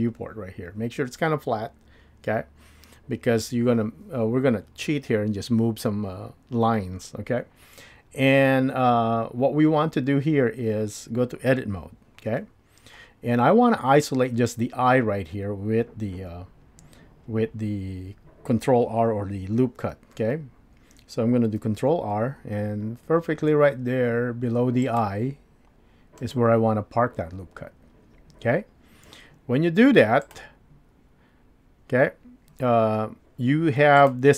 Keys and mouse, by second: 11.8 Tab, 21.6 ctrl+r, 30.3 click, 34.0 click.